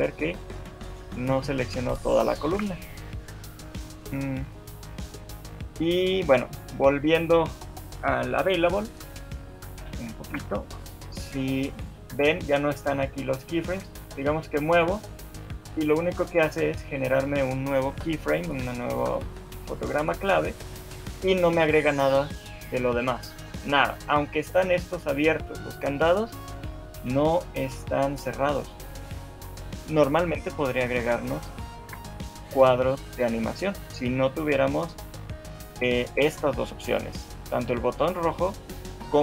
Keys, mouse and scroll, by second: 10.2 alt+shift+2, 11.2 click, 11.6 shift+middle click, 13.8 shift+middle click, 14.2 g, 18.3 shift+middle click, 26.9 shift+middle click, 30.9 shift+middle click, 31.9 ctrl+z, 32.7 shift+middle click.